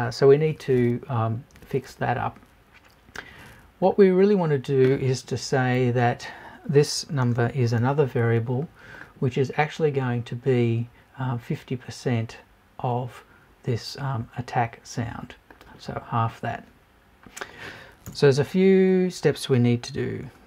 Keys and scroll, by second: 5.8 BackSpace, 7.0 shift+BackSpace, 18.1 BackSpace.